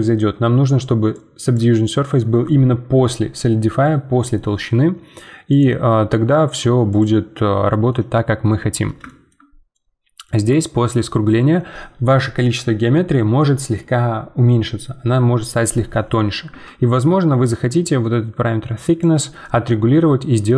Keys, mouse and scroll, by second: 1.1-2.9 drag, 5.5-7.9 drag, 7.9-9.4 middle drag, 9.4 scroll up 2, 9.7-12.9 middle drag, 17.4-19.4 shift+drag, 19.4-20.5 middle drag.